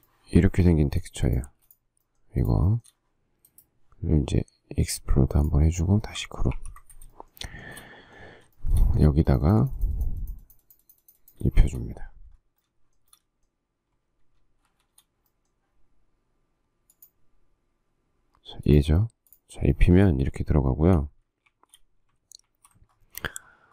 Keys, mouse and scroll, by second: 0.4 shift+middle click, 0.8 shift+middle click, 1.7 space, 3.0 shift+middle click, 6.8 ctrl+g, 7.3 shift+middle click, 8.0 shift+double middle click, 8.8 shift+double middle click, 11.7 shift+middle click, 13.3 shift+middle click, 14.9 shift+d, 20.0 shift+middle click, 20.9 shift+middle click, 21.7 shift+a, 22.7 alt+f.